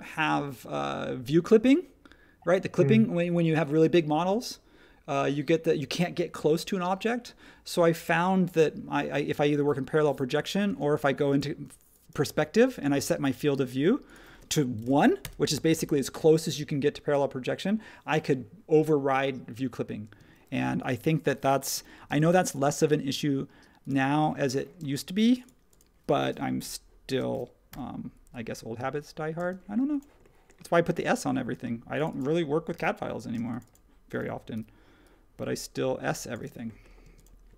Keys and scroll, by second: 10.6 space, 14.8 1, 15.2 Return, 20.1 space, 21.7-22.2 typing, 24.8 space, 26.6 l, 27.7 p, 29.4 space, 32.7 p, 33.3 space, 34.5 p, 36.4 space, 37.0 space.